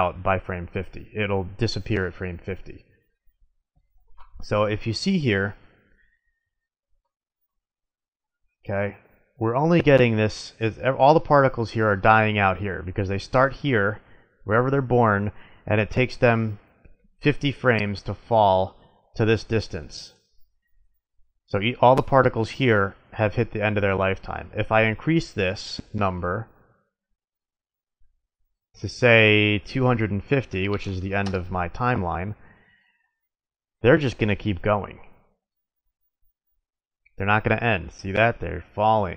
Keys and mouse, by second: 4.9-7.4 drag, 7.4-8.0 middle drag, 11.4 middle click, 27.4-30.2 drag, 30.5-33.6 middle drag, 38.4-39.1 middle drag.